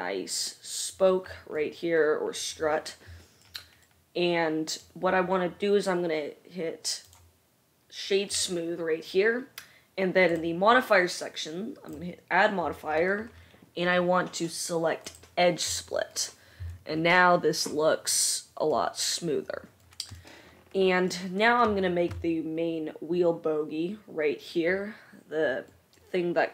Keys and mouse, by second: 7.3-17.4 right drag, 10.5-17.4 drag, 10.5-17.4 middle drag.